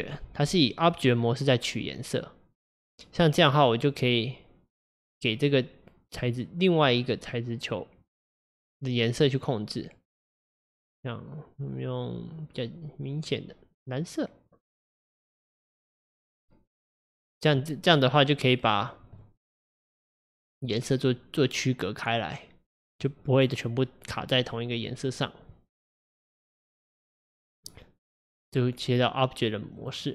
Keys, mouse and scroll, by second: 4.9 click, 6.2-8.1 drag, 17.0 click, 17.9 click, 18.9-19.3 scroll down 1, 19.3-23.1 middle drag, 25.6-28.5 middle drag, 28.5-30.1 drag.